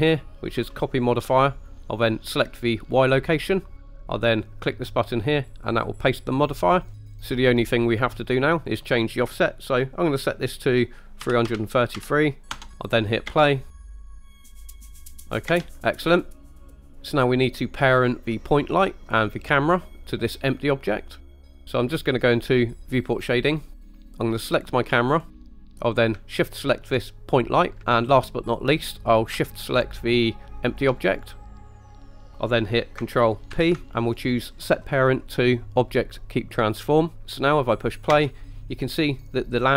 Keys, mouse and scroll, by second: 0.2 click, 3.0 click, 5.6 click, 7.2 click, 8.7-12.6 drag, 11.5 KP_3, 13.3 space, 15.5 space, 16.5 click, 20.9-21.3 middle drag, 23.3 click, 23.8 scroll down 2, 24.5 click, 25.1-25.5 scroll up 5, 25.6 middle click, 27.3 shift+click, 30.7 shift+click, 31.5 scroll down 2, 31.7 middle click, 32.1 scroll down 2, 33.6 ctrl+p, 38.2 space.